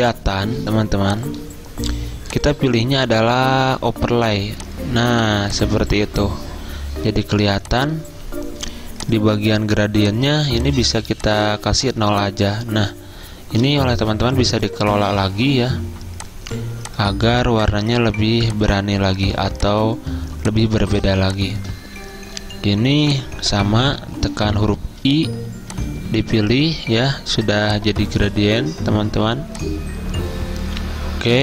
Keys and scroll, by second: 14.2 g, 18.4-19.8 typing, 27.9-28.6 typing.